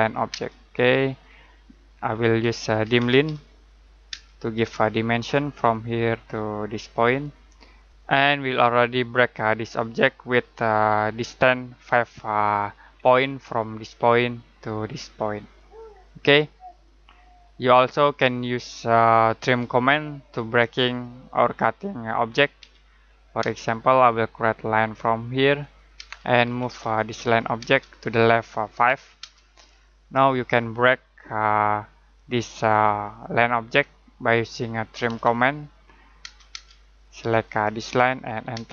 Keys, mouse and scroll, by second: 0.3 space, 2.1-4.1 typing, 5.1 click, 7.9 z, 8.5-10.6 scroll up 1, 12.9 scroll up 1, 15.9-16.2 scroll up 1, 16.2-16.6 scroll down 1, 16.6 middle click, 22.6 l, 23.4 space, 24.7 click, 26.0 space, 26.4 m, 26.6 space, 26.9 click, 27.6 space, 27.7 click, 28.8 5, 29.2 space, 34.8-36.2 typing, 37.2 click, 38.5 space.